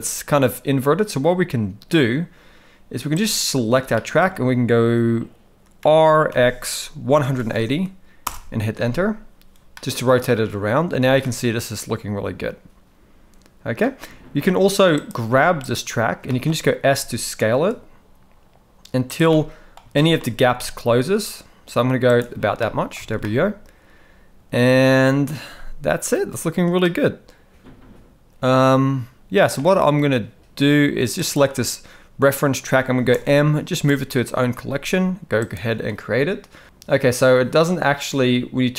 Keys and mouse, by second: 3.9 shift+middle drag, 5.8 r, 9.7-10.3 middle drag, 11.1 alt+a, 11.2-13.8 middle drag, 15.0 click, 16.2 shift+middle drag, 16.9 s, 19.3-19.7 middle drag, 19.9 shift+middle drag, 20.4 s, 22.6-23.0 middle drag, 23.1 alt+a, 23.2-25.1 middle drag, 26.8-29.5 middle drag, 31.1 click, 33.1 m.